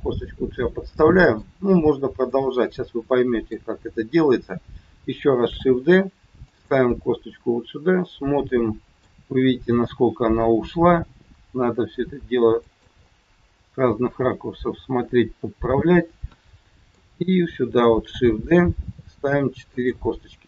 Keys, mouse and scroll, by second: 2.3 middle click, 5.4 shift+d, 6.8 middle click, 10.9 g, 13.1 middle click, 17.8 shift+d.